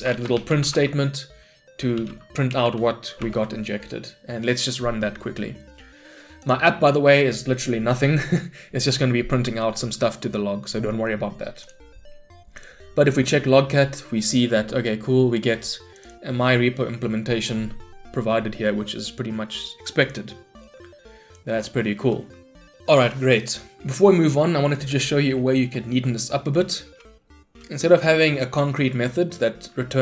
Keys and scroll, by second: 0.8 Tab, 2.6 Return, 3.2 shift+F10, 20.6 shift+Escape.